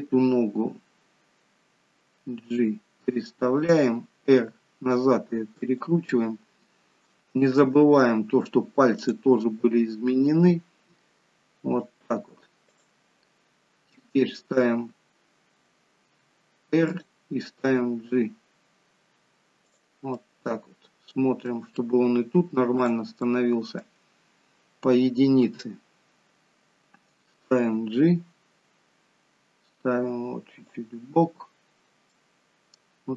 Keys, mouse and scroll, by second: 2.2 g, 4.3 r, 7.0 shift+middle click, 7.7-9.1 scroll up 1, 9.1 click, 9.1-9.9 scroll up 3, 10.3 r, 12.6 click, 13.3-13.7 scroll down 2, 13.9 middle click, 16.1 r, 20.1 middle click, 21.4 middle click, 22.9 click, 23.2 middle click, 23.9-25.3 scroll down 2, 25.3 KP_1, 27.5 g, 32.0 middle click.